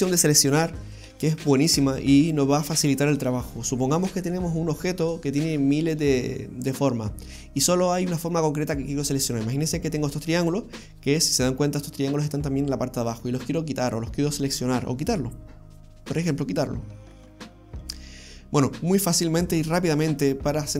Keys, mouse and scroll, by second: 8.8 right click, 10.2 right click, 12.4 middle click, 15.9-16.6 scroll up 1, 16.6 scroll down 1, 16.6-18.0 scroll down 1.